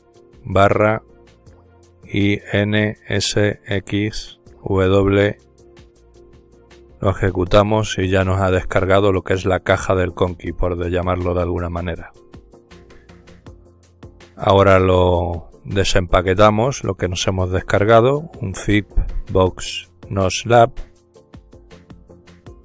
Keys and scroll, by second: 0.3-1.9 typing, 3.5-4.9 typing, 6.2 Return, 8.4-10.6 typing, 12.3-14.3 typing, 16.4-22.6 typing.